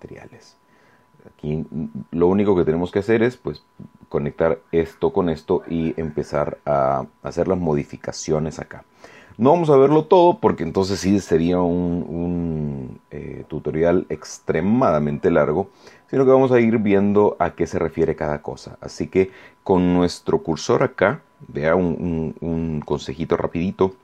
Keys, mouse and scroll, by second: 22.9-24.0 middle drag.